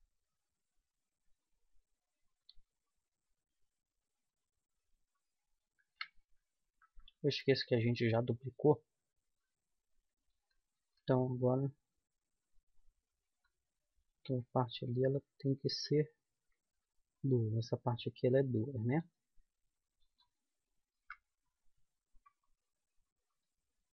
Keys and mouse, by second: 0.1 g, 2.7-4.4 right drag, 2.9 g, 7.6 ctrl+z, 9.7-11.4 right drag, 11.2 g, 14.3-16.0 right drag, 14.5 g, 16.8 middle click, 18.5 middle click, 20.0-21.4 middle drag, 21.4 KP_1.